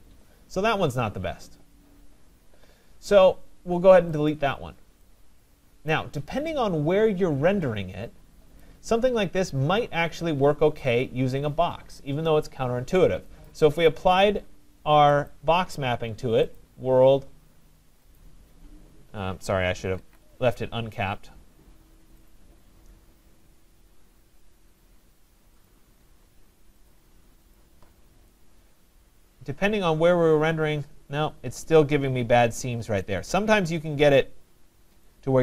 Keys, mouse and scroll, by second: 4.3 click, 5.9 right click, 5.9 click, 8.6 right click, 13.5 click, 15.3 click, 16.6 click, 18.2 click, 20.0 ctrl+z, 22.3 click, 25.7 click, 26.9 click, 27.6 click, 31.7 right click, 35.0 right click.